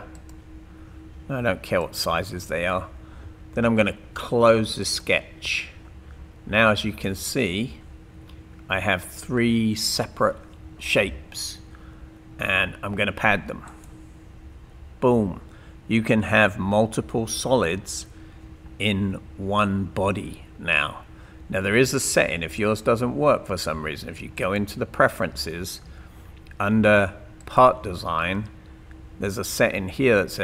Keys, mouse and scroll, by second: 0.1 click, 1.8 click, 6.9-7.3 scroll down 2, 27.4 click.